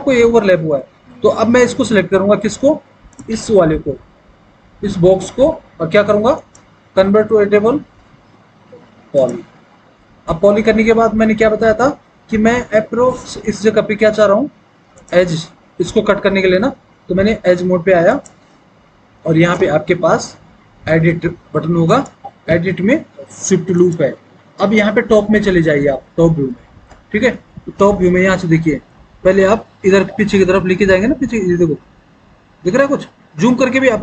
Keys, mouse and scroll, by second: 25.9 alt+w, 27.0 alt+w.